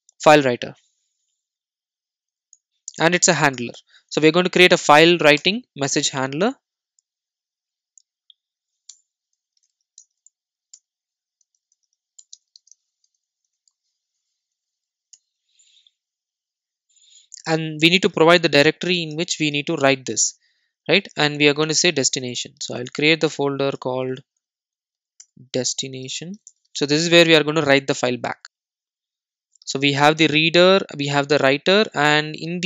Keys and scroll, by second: 3.7 Return, 10.8 Return, 23.8 super+n.